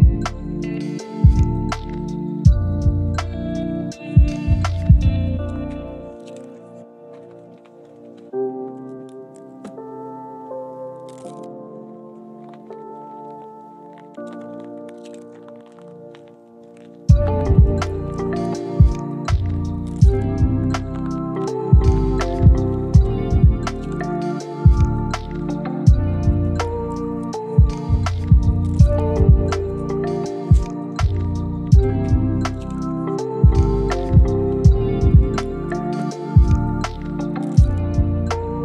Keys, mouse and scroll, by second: 0.9 drag, 1.1 g, 1.9 drag, 2.2 g, 2.7 drag, 2.8 g, 4.5 click, 4.7 g, 5.5 click, 5.7 g, 6.9 middle click, 7.6 KP_1, 8.7-9.7 drag, 10.3 drag, 10.9 Delete, 11.3 Delete, 11.4-11.9 middle drag, 12.1 z, 12.6 click, 13.0 ctrl+click, 14.0 ctrl+click, 14.4 ctrl+click, 15.1 f, 15.3-16.8 middle drag, 17.1 ctrl+z, 18.1 ctrl+click, 18.7 f, 19.1 click, 19.5 click, 19.9 ctrl+click, 20.6 f, 21.0 click, 21.4 ctrl+click, 21.6 f, 22.0 click, 22.3 ctrl+click, 23.2 click, 23.6 ctrl+click, 24.0 ctrl+click, 24.3 f, 24.7 click, 25.0 ctrl+click, 25.3 ctrl+click, 25.6 f, 26.1 click, 26.9 ctrl+click, 27.3 ctrl+click, 27.7 f, 27.9 middle click, 28.9 KP_1, 29.2 scroll up 3, 29.5 shift+middle click, 29.7 scroll down 2, 29.9 click, 30.3 a, 30.7 s, 33.8-34.9 scroll up 3, 34.2 z, 35.0 click, 36.0 r, 37.3 click, 37.6 g, 38.1 click, 38.3 g.